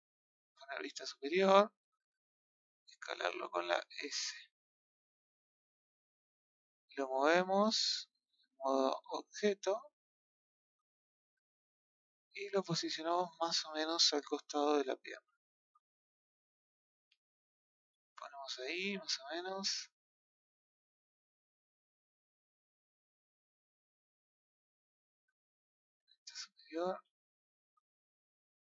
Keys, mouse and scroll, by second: 0.2 KP_7, 5.8-7.9 scroll up 2, 7.9 click, 8.8 click, 10.8-12.2 middle drag, 12.2 KP_3, 14.5 click, 16.6 click, 19.5-21.5 middle drag, 21.5 click, 24.0 click, 25.9 KP_7, 26.7 scroll up 3, 27.2-27.6 shift+middle drag, 28.4 click.